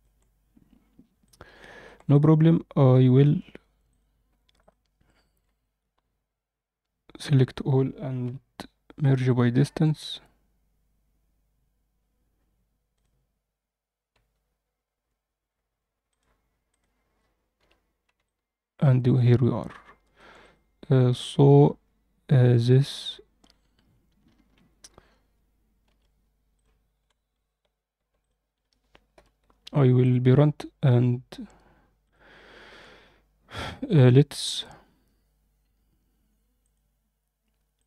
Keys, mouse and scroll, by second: 0.6 click, 0.6 middle click, 1.2-1.8 alt+middle drag, 2.0 click, 3.8 click, 4.5 click, 6.9 Tab, 7.3 a, 8.2 m, 12.8 click, 15.3 Tab, 16.0 click, 16.6 click, 17.5 h, 18.2-20.1 alt+middle drag, 20.3 click, 25.8 alt+h, 26.5 click, 28.1 shift+click, 29.1 ctrl+p, 32.0 click, 36.5 click, 37.7 click.